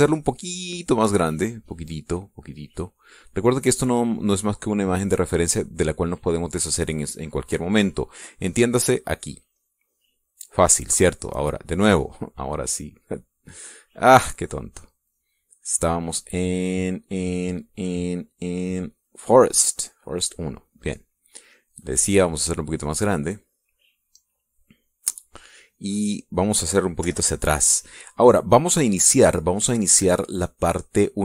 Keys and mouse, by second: 1.2 shift+click, 2.3-4.7 shift+drag, 4.9-7.1 drag, 10.4 click, 12.5 click, 14.9-19.9 drag, 20.5 click, 21.3 click, 22.3 click, 23.1 click, 23.7 click, 24.1-26.1 drag, 26.3 middle click, 27.1 middle click, 27.9 KP_Subtract, 28.5 middle click.